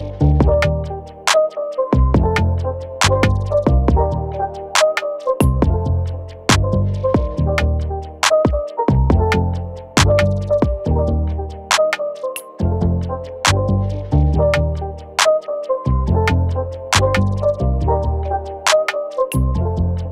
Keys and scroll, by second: 6.3-7.2 typing, 15.0 typing, 16.7 space.